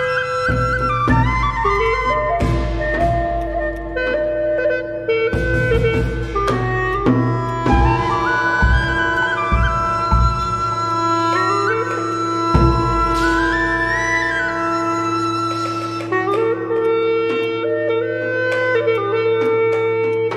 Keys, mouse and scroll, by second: 0.1 shift+click, 0.7 shift+click, 0.8 alt+click, 1.7 shift+click, 2.2 alt+click, 3.4 shift+click, 3.7 alt+click, 6.0 shift+click, 7.2-7.7 scroll down 1, 9.1 right click, 9.7 alt+middle click, 11.3-11.7 scroll down 1, 13.3 alt+click, 14.8 alt+scroll up 1, 15.2 alt+middle click, 15.8 right click.